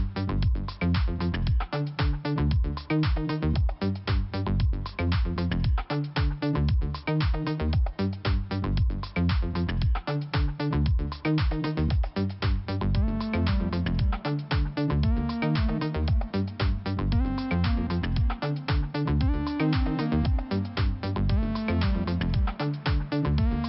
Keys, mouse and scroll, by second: 1.6 click, 1.7 click, 2.0 click, 2.1 click, 2.4 click, 2.9 click, 6.6 click, 7.2 click, 8.8 click, 14.3 click, 16.8 click, 17.4 click, 20.3 click, 21.1 click, 22.6 click.